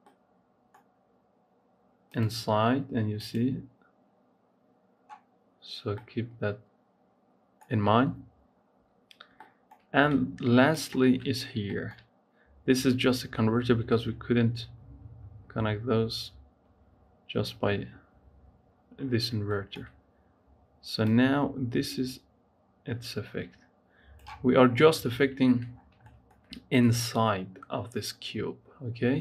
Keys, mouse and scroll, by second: 0.0 middle click, 0.6 scroll down 2, 2.0 click, 3.1 click, 5.8-8.9 middle drag, 8.9 scroll down 2, 9.2-10.6 shift+middle drag, 10.6 ctrl+shift+click, 11.7 shift+middle click, 12.0 scroll up 1, 20.9-23.9 drag, 24.4 scroll down 3, 25.6 scroll down 5, 25.9-27.5 shift+middle drag, 27.5-28.5 scroll up 4, 28.5-29.2 scroll up 1.